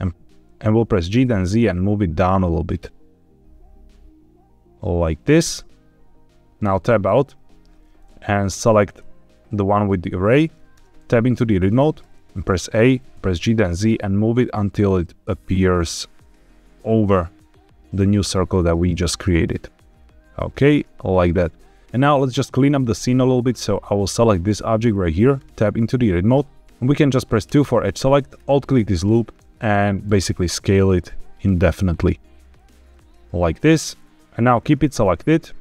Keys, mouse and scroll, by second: 0.9 g, 1.2 z, 6.5 shift+click, 6.6 Tab, 8.3 click, 8.8 click, 10.7 Tab, 12.0 a, 12.8 g, 13.1 z, 18.9 shift+click, 20.7 Tab, 23.4 click, 24.5 middle click, 24.8-25.3 scroll down 3, 25.3 Tab, 26.7 click, 26.7 3, 27.4 2, 28.3 alt+click, 29.5-30.0 scroll down 2, 30.0 s, 32.5 click, 33.8-34.1 scroll up 3, 34.1 Tab, 34.3 scroll down 5, 34.6-35.2 scroll up 4.